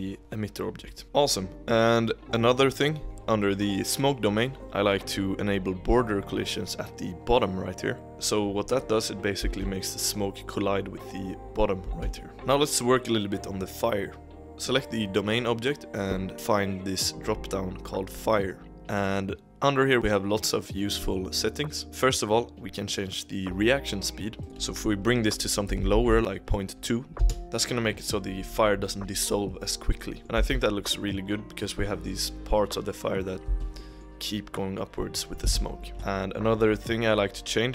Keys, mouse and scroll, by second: 0.2-0.7 middle drag, 0.7 click, 1.0-3.9 middle drag, 8.7-9.4 drag, 9.4 space, 11.9 space, 12.3-13.9 scroll up 1, 14.4 click, 16.3 scroll down 6, 18.6-20.0 drag, 24.4-26.2 drag, 30.2 middle click, 30.4 space, 33.5 space, 33.7-35.5 middle drag, 35.5 space.